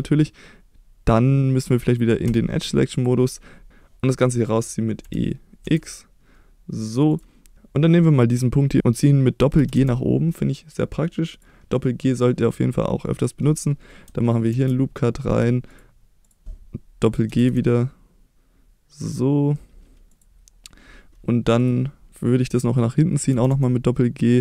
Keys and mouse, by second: 2.2 2, 2.9 click, 5.5 e, 5.6 x, 7.1 click, 8.3 click, 9.7 g, 11.3 click, 14.5 ctrl+r, 15.7 click, 17.3 g, 17.5 g, 20.1 click, 23.3 g, 23.5 g.